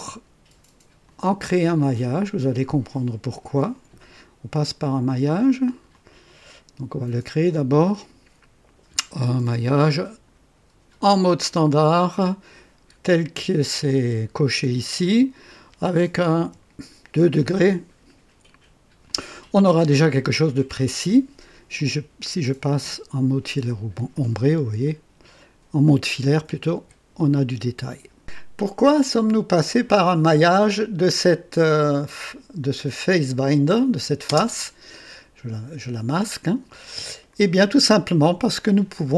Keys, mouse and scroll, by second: 1.0 click, 5.9 click, 9.7 click, 16.4 KP_2, 19.0 click, 21.7 click, 22.8 &, 24.1-26.5 drag, 26.8 &, 27.3 click, 32.0 click, 32.7 click, 33.7 click, 34.2 space, 36.6 click.